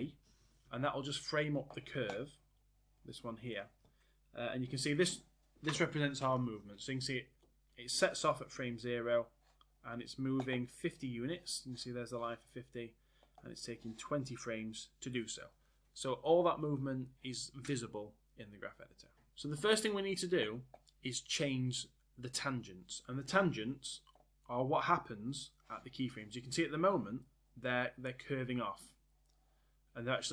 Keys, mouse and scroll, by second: 0.0 a.